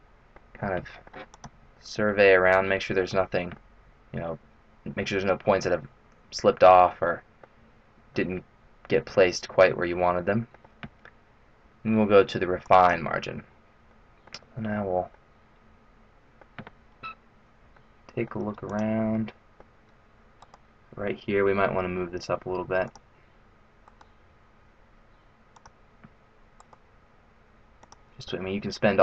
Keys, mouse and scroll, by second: 0.6 middle click, 1.3 click, 1.7 middle click, 3.1 middle click, 7.0 middle click, 8.1 middle click, 12.1-12.6 scroll down 1, 12.6 click, 13.8 middle click, 14.5-15.0 scroll up 2, 15.0 middle click, 15.0-15.8 scroll up 1, 17.8 middle click, 18.6 click, 19.1 middle click, 20.4 right click, 21.5 g, 23.8 right click, 24.2 g, 26.5 right click, 26.7 g, 28.2 middle click.